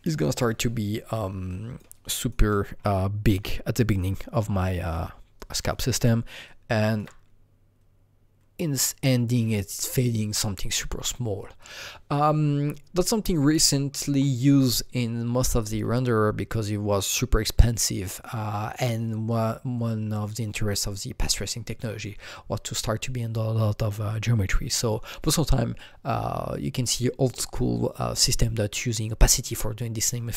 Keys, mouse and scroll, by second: 2.2-6.4 alt+right drag, 2.2 alt+click, 2.8 alt+middle click, 6.0 alt+middle click, 6.4-9.4 alt+right drag, 11.6 click, 11.6-14.2 alt+right drag, 11.6 alt+middle click.